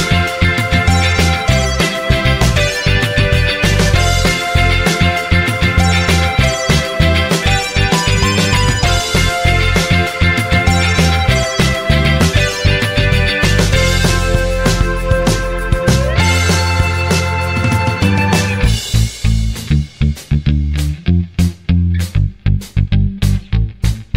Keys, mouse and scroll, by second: 0.7 click, 6.7 click, 7.5 click, 8.1 ctrl+click, 9.8 click, 12.5 click, 13.5 click, 14.6 click, 17.1 click, 17.8 click, 19.4 click, 20.6 click, 21.6 click, 23.1 scroll down 1.